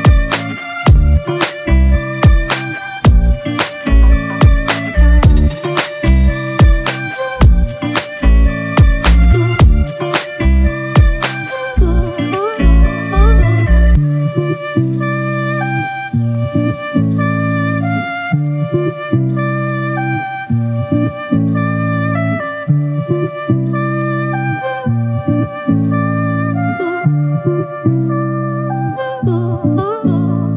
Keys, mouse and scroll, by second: 5.0 ctrl+click, 5.5 right click, 11.8 ctrl+n, 23.8 ctrl+-, 25.2 ctrl+t, 27.6 alt+shift+click.